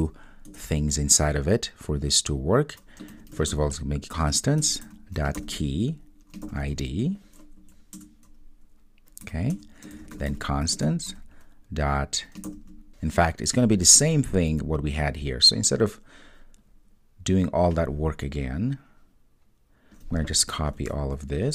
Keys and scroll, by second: 4.7 Return, 20.8 super+c.